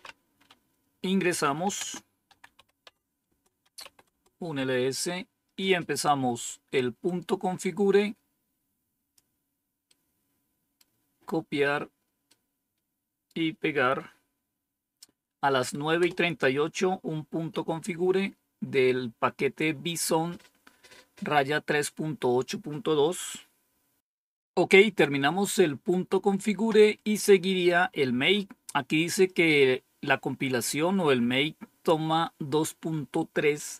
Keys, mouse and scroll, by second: 1.1-4.0 typing, 3.2 Return, 6.9-9.1 drag, 9.8 right click, 12.2-13.2 right drag, 15.9 Return.